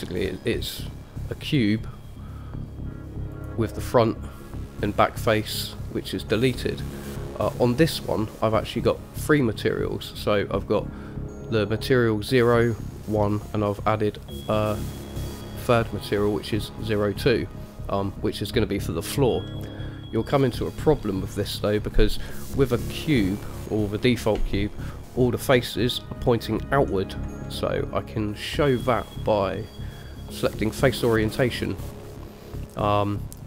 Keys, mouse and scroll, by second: 1.7 click, 3.5 click, 4.2-7.3 middle drag, 9.5 click, 12.5 click, 13.2 click, 15.3 click, 19.7-20.1 middle drag, 22.5-23.2 middle drag, 28.9-31.1 drag, 31.4-33.4 middle drag.